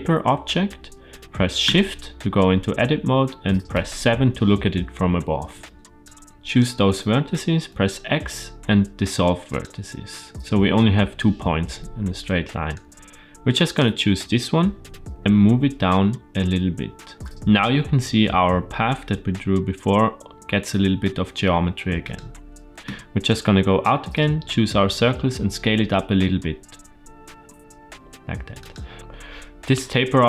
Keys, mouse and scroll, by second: 1.5 Tab, 3.6 KP_7, 5.5 shift+middle click, 5.7 right click, 5.9 click, 7.6 x, 12.6-13.6 drag, 14.7 g, 22.7 Tab, 23.2-23.7 drag, 24.7 s.